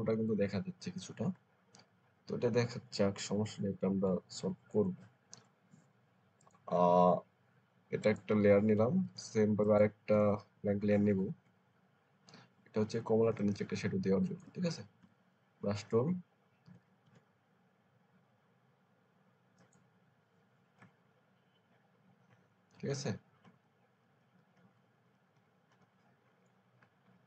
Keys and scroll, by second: 2.8 Up, 3.2 Up, 4.4 Down, 13.2 space, 14.9 b, 16.5 [, 16.9 [, 23.3 Right, 23.5 Right, 23.9 Right, 24.1 Right, 24.3 Right, 24.4 Right, 24.6 Right, 24.8 Right, 25.0 Right, 25.2 Right, 25.6 Right.